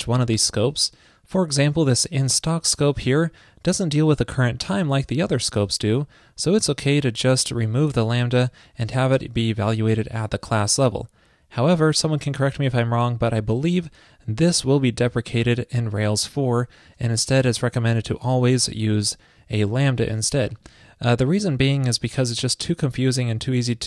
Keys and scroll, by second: 8.4 super+Right, 18.1 super+z.